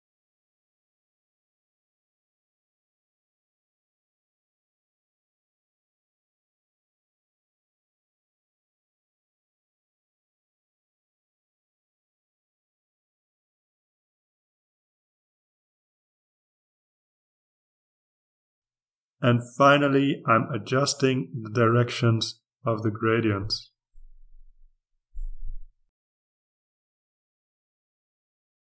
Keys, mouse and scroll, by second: 0.1-2.3 drag, 2.6-5.3 drag, 5.5-6.9 drag, 7.2-9.1 drag, 9.5-10.6 drag, 11.0-12.4 drag, 12.8-14.2 drag, 14.5-15.9 drag, 16.0-17.6 drag, 17.7-21.4 drag, 21.8 click, 25.9-28.6 drag.